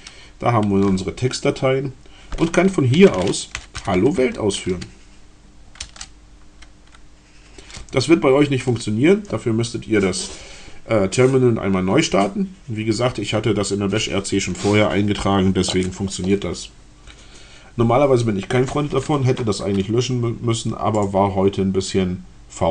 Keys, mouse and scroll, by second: 0.0-0.2 typing, 2.5-4.4 typing, 5.5 Return, 19.7-20.5 scroll down 2, 20.9 click, 21.3 scroll down 2.